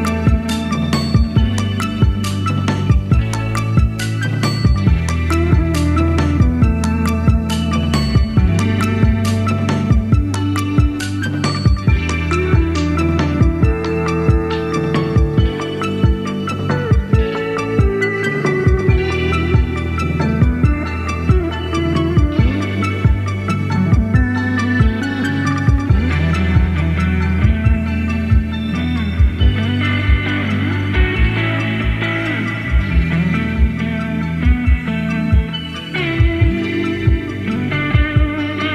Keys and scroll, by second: 4.5 super+d, 5.6 super+z, 8.0 BackSpace, 8.8 super+d, 11.6 super+d, 11.8 super+d, 11.9 super+d, 21.8 super+c, 21.9 super+v, 30.5-31.4 typing, 33.1 super+c, 33.2 super+v.